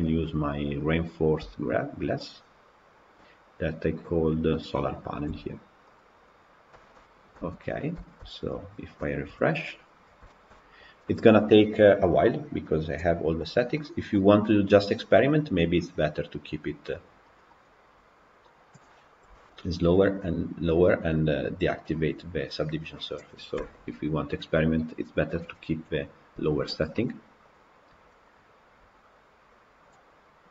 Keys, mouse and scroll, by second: 0.8 shift+click, 1.2 shift+click, 4.4 click, 6.2 click, 6.6 shift+middle click, 7.5 Tab, 7.9 shift+middle click, 8.5 click, 9.2 KP_Decimal, 9.8 scroll up 2, 10.2-13.1 shift+middle drag, 13.1-13.6 scroll down 5, 13.6 middle click, 14.0-14.7 scroll up 1, 14.7 click, 17.4 click, 18.5 click, 19.2 KP_Decimal, 21.6 click, 23.0 click, 23.5 KP_Decimal, 24.1-24.5 scroll up 1, 24.5-30.5 scroll down 1.